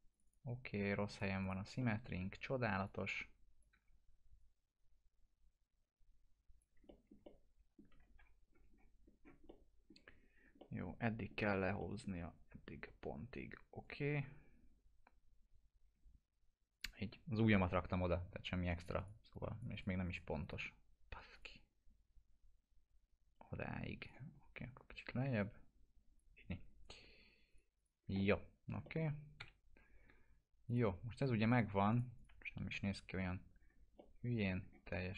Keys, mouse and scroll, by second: 1.8 alt+middle click, 2.8-3.8 click, 3.7 w, 4.4-7.1 drag, 6.8 alt+middle click, 7.5 middle click, 7.9 f, 8.7-9.4 scroll up 2, 9.7-10.1 middle click, 10.2-10.6 scroll up 2, 11.4 scroll down 1, 11.8 middle click, 13.8-16.9 drag, 24.0 click, 25.7-26.3 drag, 28.1-28.8 alt+middle click, 29.4 p, 30.6 click, 32.4 F4, 33.1 scroll down 1, 33.9-34.6 alt+middle click, 34.9-35.1 scroll up 1.